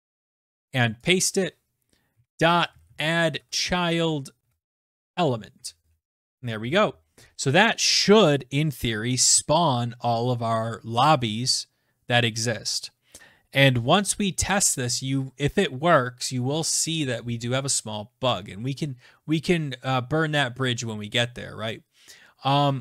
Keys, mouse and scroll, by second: 0.1 ctrl+v, 0.8 click, 2.0-5.7 typing, 5.9 ctrl+s.